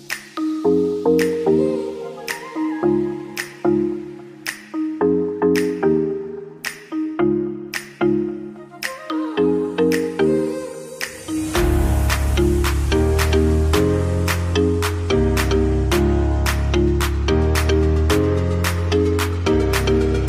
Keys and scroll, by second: 4.0 Right, 6.8 Right, 7.6 Left, 14.1 5.